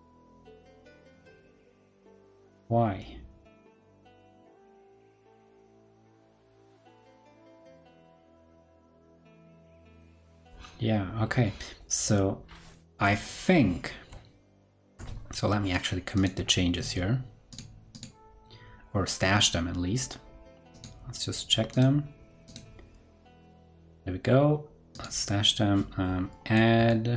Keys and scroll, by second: 14.8 super+Tab, 16.3 super+Tab.